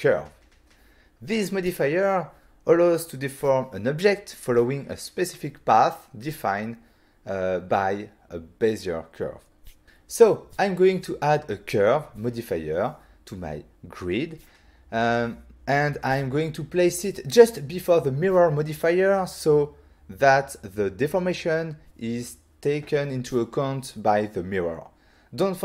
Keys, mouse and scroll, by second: 9.8 click, 10.5 click, 18.3 click, 20.4 click, 22.0 scroll down 1, 22.5 scroll down 1.